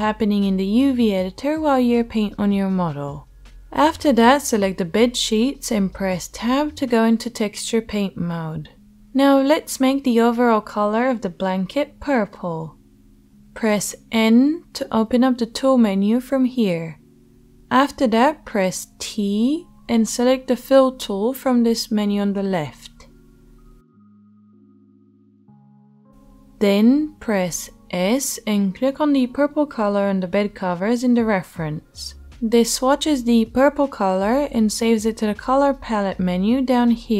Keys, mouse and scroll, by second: 6.0 Tab, 14.1 n, 16.3-24.6 middle drag, 19.1 t, 24.6-37.1 drag, 31.3 s.